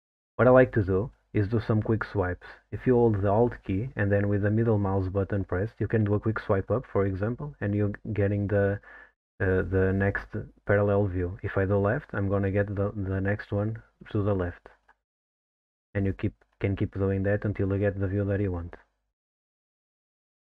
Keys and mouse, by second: 6.1-6.4 alt+middle drag, 11.8 alt+middle drag, 14.7 alt+middle drag, 15.1 alt+middle click, 15.6 alt+middle click, 16.0 alt+middle drag, 16.5 alt+middle drag, 16.9 alt+middle drag, 17.3 alt+middle click, 17.7 alt+middle click, 18.1 alt+middle drag, 18.7 alt+middle drag.